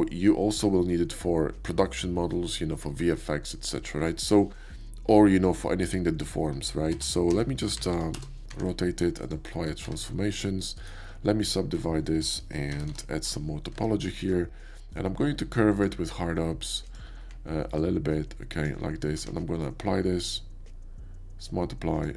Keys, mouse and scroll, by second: 6.9 r, 7.3 x, 7.9 9, 7.9 0, 8.1 Return, 8.9 ctrl+a, 9.2 click, 9.5 middle click, 9.8 Tab, 10.7 right click, 11.7 click, 12.6 shift+r, 13.0 shift+r, 13.7 Tab, 14.2 middle click, 15.7 click, 16.9 click, 17.8 ctrl+click, 19.1 q, 21.4 click.